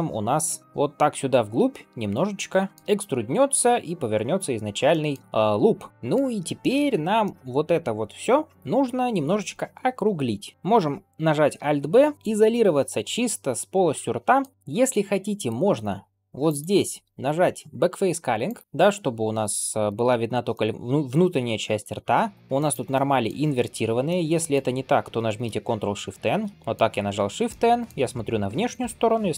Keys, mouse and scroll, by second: 0.6 shift+middle click, 2.7 shift+middle click, 4.8 shift+middle click, 5.2 scroll up 2, 5.9 middle click, 6.5 shift+middle click, 6.8 scroll up 1, 7.1-8.4 middle drag, 8.5 scroll up 1, 8.6-9.2 scroll down 1, 11.4 alt+b, 12.3 KP_Divide, 13.0-13.4 scroll down 1, 13.4 middle click, 14.8 middle click, 16.3-18.6 drag, 18.7 middle click, 19.7 shift+middle click, 20.0-20.4 scroll up 2, 20.4-22.3 middle drag, 22.4 shift+middle click, 22.8 middle click, 23.4 a, 23.9 middle click, 26.5 middle click, 26.5 shift+n, 27.1 alt+z, 27.3 middle click, 27.9-28.3 scroll down 1, 28.3 middle click.